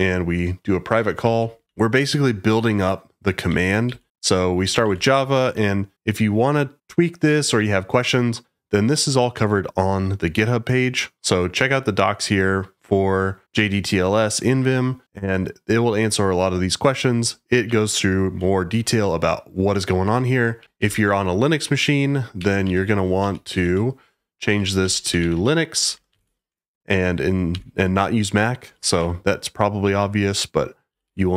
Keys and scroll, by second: 0.0-0.2 typing, 1.2-1.6 typing, 3.4-4.8 typing, 5.4 Escape, 17.6-18.4 typing, 20.3-29.4 typing, 21.6 Escape, 30.9-31.3 typing.